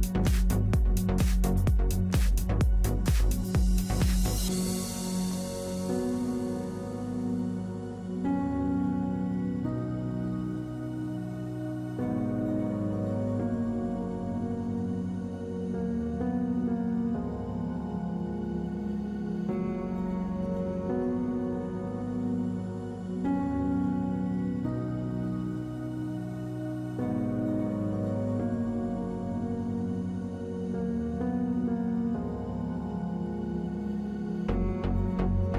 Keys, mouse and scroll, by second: 9.6 ctrl+a, 9.9 ctrl+c, 10.3 Right, 10.7 Return, 11.1 ctrl+v, 11.6 Return, 11.9 ctrl+v, 15.6 ctrl+click, 16.8 ctrl+a, 19.4 ctrl+d, 20.5 right click, 24.6 ctrl+t, 25.3 right click.